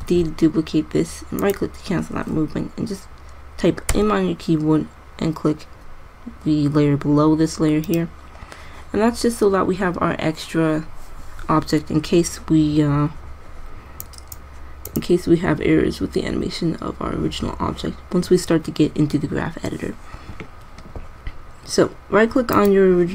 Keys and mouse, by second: 0.3 shift+d, 4.1 m, 14.3-16.0 right drag, 22.8-23.1 drag.